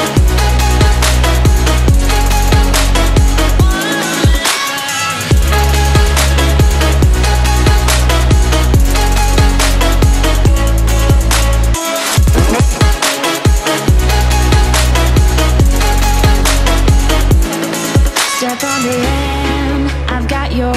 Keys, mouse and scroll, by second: 0.4-0.9 alt+drag, 4.2 Left, 4.4 Up, 7.0 click, 7.4 space, 7.6 click, 7.8 space, 8.4 click, 10.3 click, 14.9 click, 17.9 click.